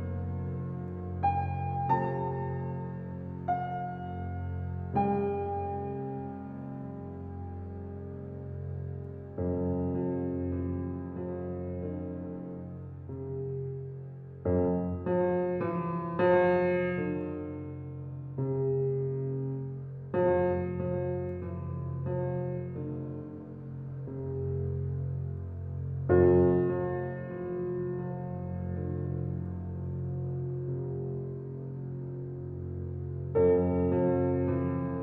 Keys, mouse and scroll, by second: 0.5 click, 0.6-13.7 drag, 15.1 click, 16.2 alt+right click, 16.3 alt+click, 16.7 alt+right click, 17.3 alt+click, 17.5 alt+right click, 18.0 alt+middle click, 18.4 alt+right click, 19.0 alt+click, 19.5-21.2 alt+right drag, 21.2 alt+middle click, 21.4 alt+right click, 21.8 alt+click, 22.3 alt+right click, 23.1 alt+click, 23.4 alt+middle click, 24.0 alt+right click, 24.2-26.9 alt+middle drag, 26.9 click, 28.6 right click, 28.6 right click, 29.3 click.